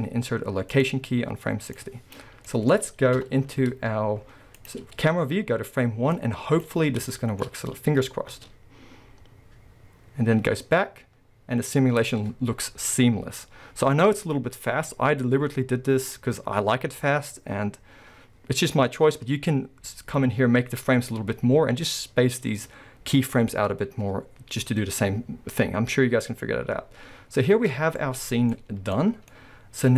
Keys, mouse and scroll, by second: 1.7-2.5 drag, 2.5-4.8 middle drag, 3.2 KP_0, 3.5 z, 4.8 scroll up 1, 6.1 click, 6.8 scroll up 1, 7.1-15.5 shift+middle drag, 7.6-8.3 scroll down 2, 8.3 space, 27.2 scroll down 2, 27.7-29.9 middle drag, 28.0 scroll down 1, 28.9-29.3 scroll down 1.